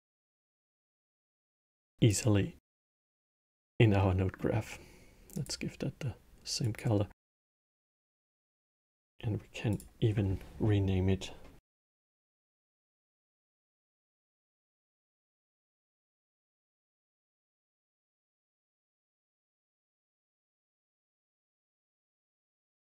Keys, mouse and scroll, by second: 2.2-3.3 middle drag, 3.3 click, 4.1 middle click, 5.1 click, 7.3-8.1 middle drag, 8.1 click, 9.4-12.5 drag, 15.6 t, 19.6 click.